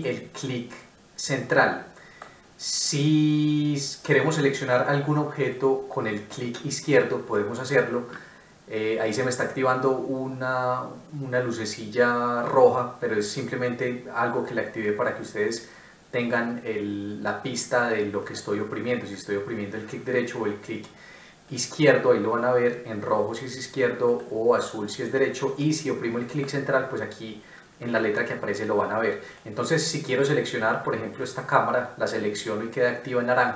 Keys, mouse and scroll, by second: 0.0 middle click, 18.2 right click, 24.0 right click, 25.0 Escape, 25.6 middle click.